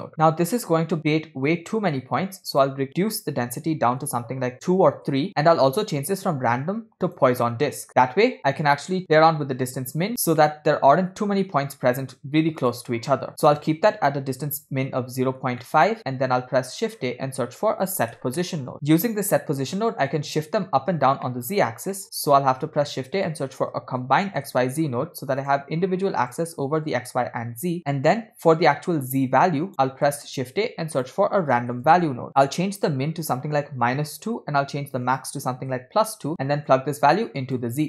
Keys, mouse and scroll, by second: 0.4-1.1 scroll up 4, 1.8 middle click, 2.5-5.0 drag, 6.0-7.2 drag, 7.9 scroll up 2, 8.4-10.1 drag, 10.4 scroll down 2, 10.4-11.3 middle drag, 12.3 scroll up 2, 12.6 click, 15.3-15.7 scroll down 2, 15.7 middle click, 16.1 shift+a, 19.1 click, 19.8-20.2 middle drag, 21.3 middle click, 21.7 scroll down 2, 22.0 middle click, 22.8 shift+a, 26.9-27.8 drag, 27.8 middle click, 29.4 click, 29.9 middle click, 30.3 shift+a, 32.3-34.2 drag, 32.3 scroll up 2, 35.1 click, 36.7-37.7 drag.